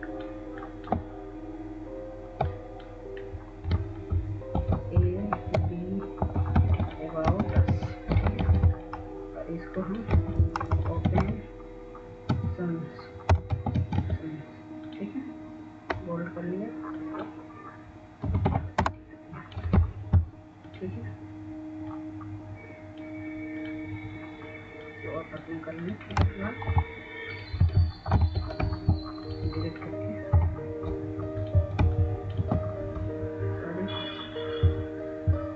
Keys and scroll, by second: 4.2 ctrl+space, 4.7 ctrl+space, 7.9 a, 8.9-11.6 typing, 11.8 ctrl+a, 13.8-17.7 typing, 21.4-22.1 typing, 22.3 Return, 31.6 Up, 31.6 ctrl+0, 32.0 ctrl+space.